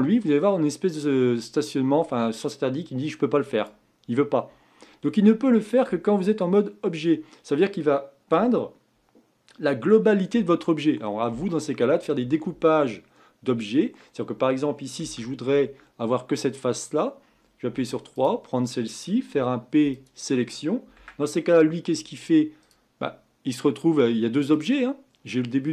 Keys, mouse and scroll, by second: 4.7 scroll down 2, 15.0 Tab, 15.5 Tab, 17.7 3, 18.1 click, 19.3 p, 20.9 Tab, 22.0 click, 22.6 click, 24.5 click.